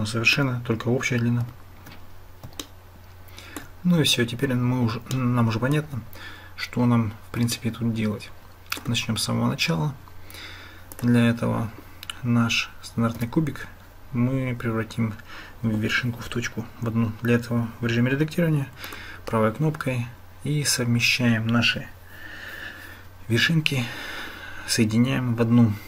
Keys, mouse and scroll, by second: 0.0 shift+click, 2.8 shift+click, 5.1 shift+click, 7.7-8.8 shift+drag, 13.2 Tab, 18.9-25.8 drag.